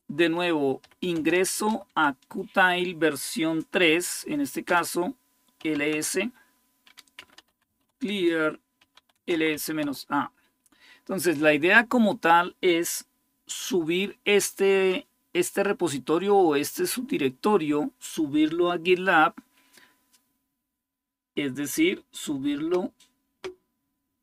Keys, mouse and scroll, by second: 0.0-2.0 typing, 3.3-9.8 typing, 4.4 Return.